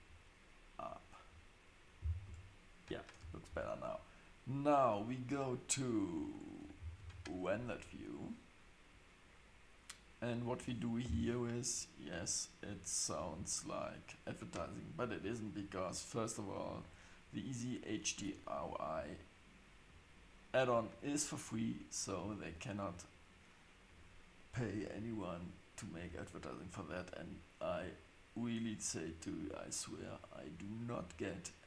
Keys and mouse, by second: 2.2 Tab, 7.0 super+s, 7.9-8.2 drag, 11.0 n, 16.6 click, 19.8-20.5 drag.